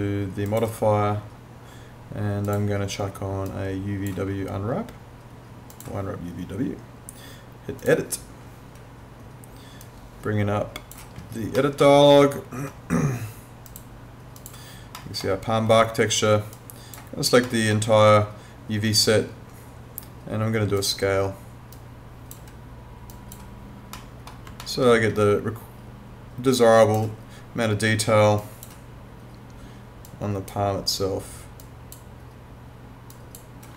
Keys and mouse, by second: 0.5 click, 11.6 middle click, 13.7 click, 15.0 middle click, 16.6 click, 17.4 middle click, 20.8 click, 24.0 middle click, 24.6 alt+middle click, 26.6 click.